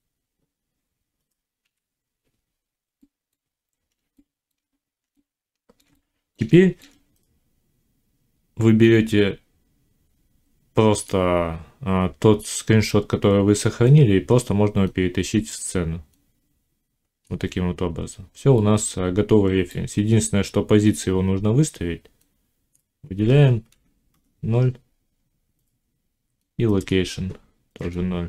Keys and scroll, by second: 1.5 ., 23.6 0, 24.0 Return, 27.6 0.